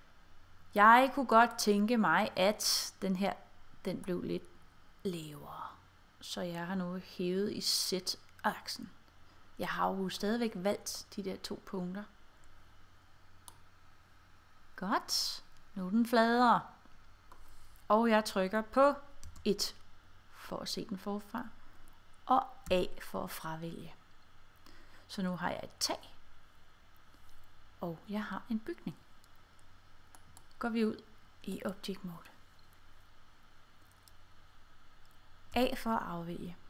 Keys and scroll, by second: 19.3 1, 22.8 a, 35.6 a.